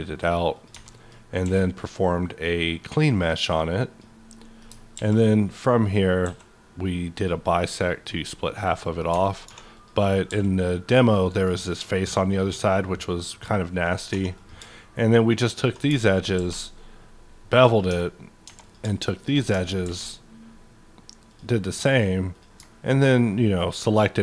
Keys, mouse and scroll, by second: 0.5 click, 0.7 Tab, 0.9 middle click, 1.4 middle click, 1.4 q, 2.6-5.0 drag, 4.3 middle click, 5.0 alt+x, 6.2 d, 7.1 click, 7.9 click, 8.3 middle click, 9.1 Tab, 9.5 3, 9.7 click, 10.3 x, 10.8 click, 11.2 middle click, 12.6-14.3 middle drag, 14.1 2, 14.3 click, 15.8 shift+click, 16.3 ctrl+b, 17.0-17.6 scroll up 7, 17.6 click, 17.9 Tab, 18.3 Tab, 18.6 click, 19.1 click, 19.8 ctrl+b, 20.9-21.3 scroll down 1, 21.3 click, 22.3 click, 22.9 ctrl+click, 23.6 ctrl+click.